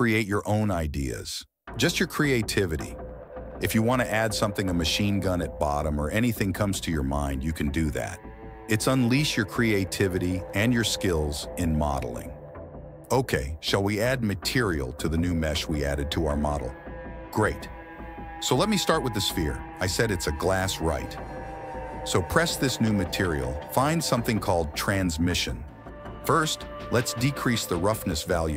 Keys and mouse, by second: 0.1 click, 0.7 right click, 1.0 ctrl+b, 1.7 right click, 1.9 i, 2.4 alt+e, 3.2 s, 3.9 Tab, 4.3 KP_1, 4.7 shift+d, 6.5 click, 7.5 shift+click, 7.8 g, 8.7 click, 11.8 click, 13.7 click, 14.0-14.3 right drag, 18.5 click, 20.3 click, 20.8 /, 21.8 click, 23.1 click, 25.1-26.4 drag, 27.5-28.5 drag.